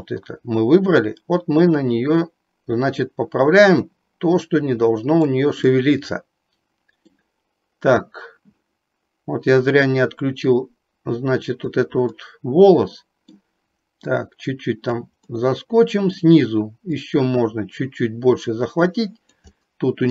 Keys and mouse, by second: 0.2-5.4 drag, 5.8-7.2 middle drag, 9.7-11.9 drag, 12.3-13.3 middle drag, 14.2 click, 15.3 middle click, 17.2-19.5 drag, 19.7 middle click.